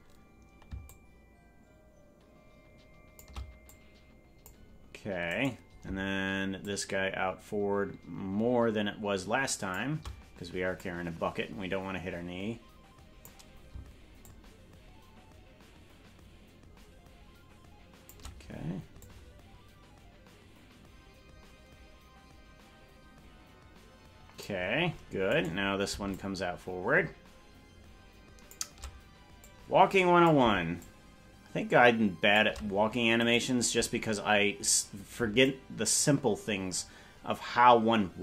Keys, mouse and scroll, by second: 0.8-3.2 shift+drag, 3.6 click, 5.4 right click, 6.6-9.7 shift+drag, 10.7-13.2 drag, 14.2-18.1 shift+drag, 19.0-24.4 drag, 25.5 right click, 26.1-28.5 shift+drag, 29.3 click, 30.7-32.4 shift+drag, 33.3-34.3 right drag, 35.4-38.2 shift+drag.